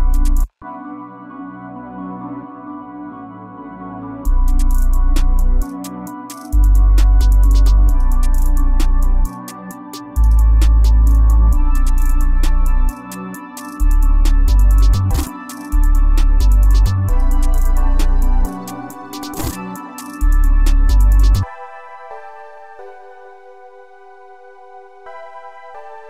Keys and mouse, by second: 20.7 F1, 21.2 F1, 21.6 F1.